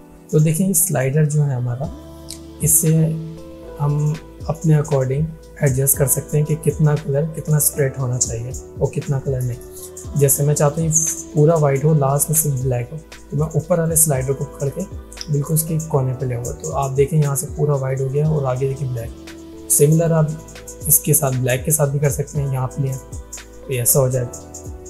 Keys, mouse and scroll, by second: 12.8-13.4 drag, 20.1-23.2 drag.